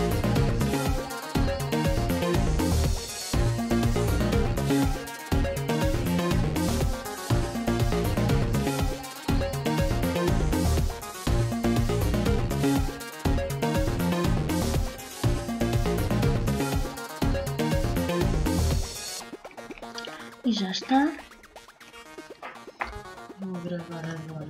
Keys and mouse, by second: 1.7 right click, 2.7 w, 4.4 w, 6.1 ctrl+z, 7.2 w, 9.1 w, 11.1 w, 14.5-15.5 drag, 18.1-20.5 middle drag.